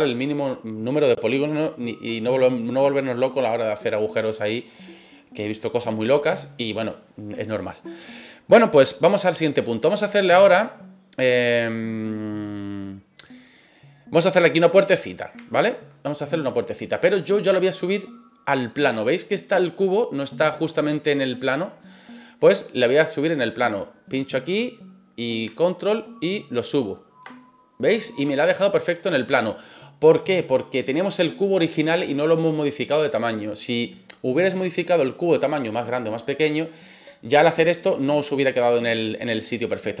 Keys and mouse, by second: 6.1-6.6 middle drag, 9.2-10.0 middle drag, 15.4-15.7 shift+middle drag, 15.9-16.7 middle drag, 18.9-22.3 middle drag, 24.0-26.9 drag, 27.9-29.8 middle drag, 38.2-39.9 middle drag.